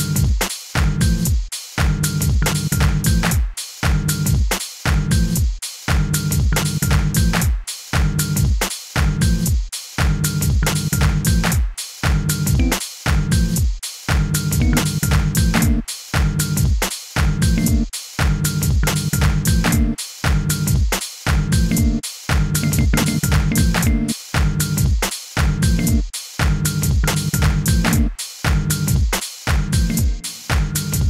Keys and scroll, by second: 12.5 h, 14.6 y, 15.5 g, 17.5 g, 19.6 g, 20.6 super+g, 20.8 super+d, 21.7 super+g, 25.7 g, 27.8 g, 29.8 g.